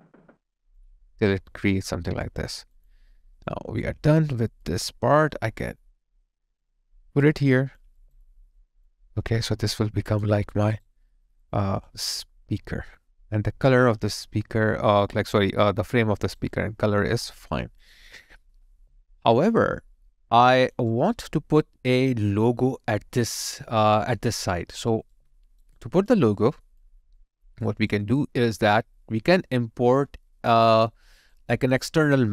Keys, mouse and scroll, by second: 3.3 space, 3.5 alt+right click, 8.0 alt+right click, 8.2 alt+click, 9.1 alt+middle click, 9.6 alt+click, 10.5 alt+right click, 11.9 alt+click, 16.2 alt+right click, 16.5 alt+click, 18.9 alt+right click, 19.5 alt+click, 20.9 alt+right click, 25.1 alt+right click, 25.8 alt+click, 26.4 alt+middle click, 26.8 alt+click, 27.7 alt+right click, 28.0 alt+click, 30.8 alt+right click, 31.3 alt+click.